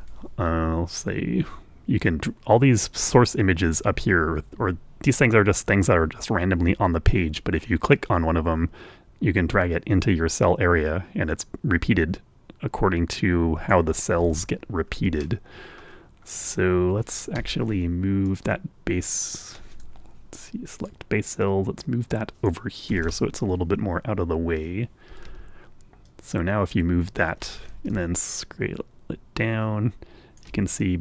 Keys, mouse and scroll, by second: 1.0 Return, 9.3-14.9 drag, 15.9-16.4 ctrl+scroll up 1, 16.7 middle click, 18.8 Escape, 19.7-21.1 drag, 22.2 click, 22.9 click, 24.2 Return, 26.7 Escape, 27.5-29.1 drag, 29.3-31.0 ctrl+drag.